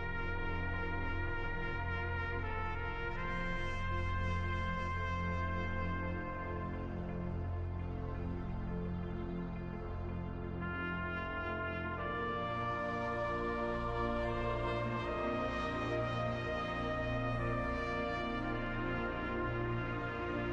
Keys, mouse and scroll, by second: 1.4-5.0 drag, 7.3 middle click, 7.9 f, 9.6-10.8 drag, 10.8 f, 12.5-15.3 drag, 15.5 middle click, 16.2 f, 18.1-20.5 drag.